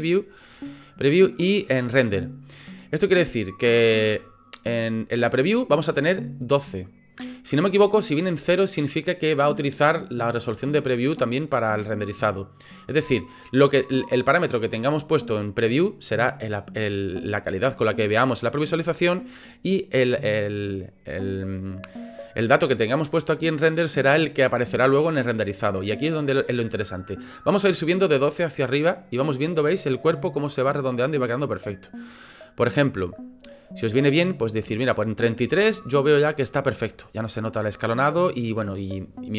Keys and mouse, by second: 28.2-33.6 drag, 35.2 middle click, 35.7 shift+click, 36.1 click, 36.5 click.